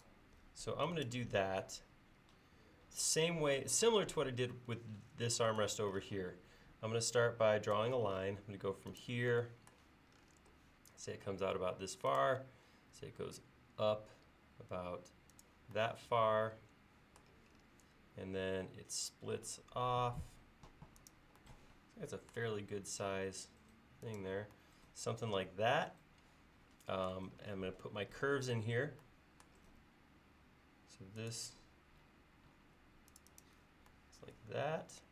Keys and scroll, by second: 7.8 l, 29.7 a.